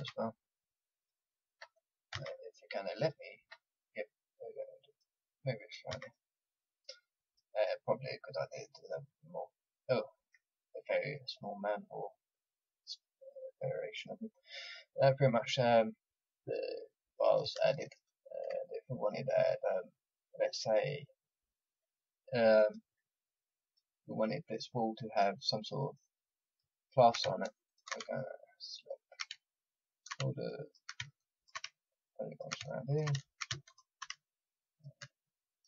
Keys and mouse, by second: 2.1 a, 5.9 a, 6.1 middle click, 6.5 middle click, 11.6-13.0 middle drag, 14.2 click, 17.2-22.6 middle drag, 22.6-35.6 drag.